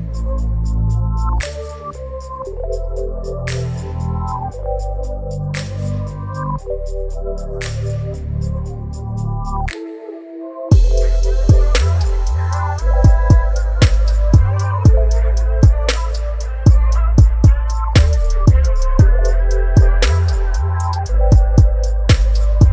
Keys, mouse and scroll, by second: 4.9-8.4 drag, 8.4-19.0 alt+drag.